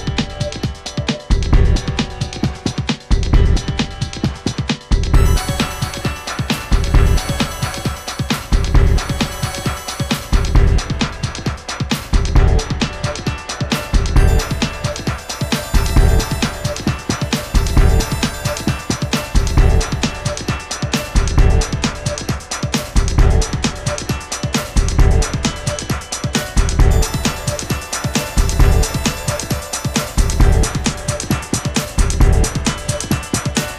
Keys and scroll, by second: 0.0 v, 9.5 i, 11.9 v, 12.9 shift+Down, 15.1 Down, 16.0 Up, 16.5 Down, 17.0 shift+Down, 17.4 shift+Up, 17.8 Down, 28.6 v.